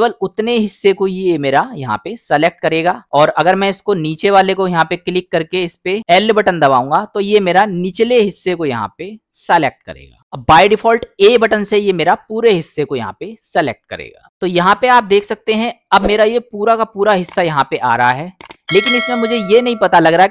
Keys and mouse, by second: 0.2-2.9 middle drag, 3.5 click, 6.9 l, 8.1-10.2 middle drag, 11.4 a, 12.1-13.6 middle drag, 15.3 middle click, 19.1 middle click.